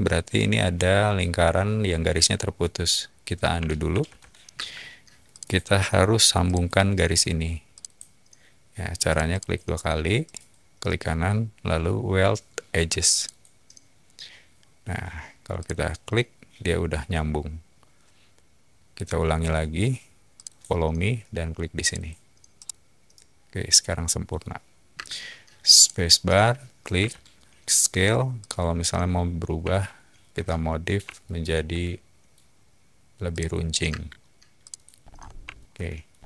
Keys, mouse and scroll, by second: 4.3 ctrl+z, 4.5 space, 5.3 click, 6.4 click, 7.7 click, 9.0 click, 9.3 click, 10.2 right click, 13.1 click, 15.6 click, 20.3 click, 21.8 click, 22.5-24.3 middle drag, 24.9 space, 25.7 click, 26.9 s, 28.3-29.2 typing, 28.3 click, 29.7-30.8 shift+middle drag, 30.7-33.8 typing, 31.1-32.2 shift+middle drag, 33.3 click, 34.6 click, 35.0 middle drag, 35.0 scroll down 2, 35.4-35.9 shift+middle drag.